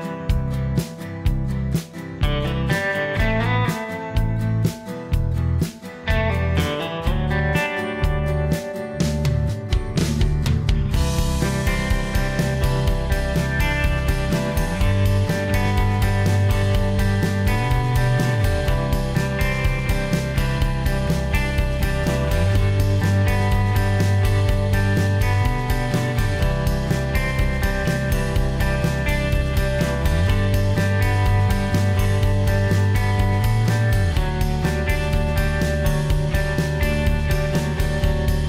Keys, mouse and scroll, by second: 5.1 s, 7.3 m, 11.4 m, 27.5 s.